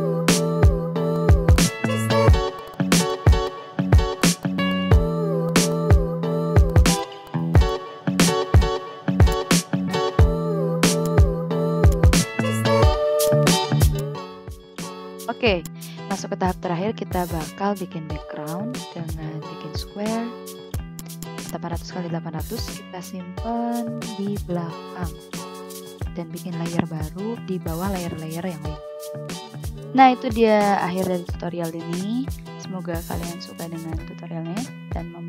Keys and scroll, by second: 1.3 a, 1.8 Down, 2.4 ctrl+z, 2.9 Down, 3.7 Down, 4.0 Right, 4.1 Up, 4.6 Down, 5.6 i, 5.8 v, 7.6 v, 8.5 ctrl+z, 12.4 v, 13.0 ctrl+x, 15.0 ctrl+v, 18.0 v.